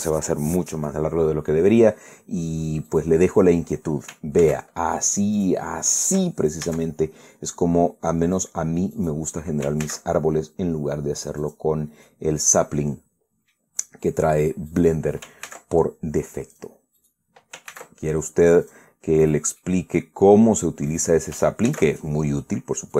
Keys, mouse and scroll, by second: 3.6 right click, 5.1 ctrl+a, 6.1 click, 6.6 ctrl+right click, 7.4 ctrl+a, 9.1 click, 9.7 right click, 10.5 ctrl+a, 12.1 click, 12.4-12.8 scroll down 1, 12.8-14.4 middle drag, 14.6 scroll up 1, 15.4 right click, 16.2 ctrl+a, 17.2 click, 17.7 right click, 18.4 ctrl+a, 19.4 click, 19.9 right click, 20.3 middle click, 21.6 right click, 22.4 ctrl+a.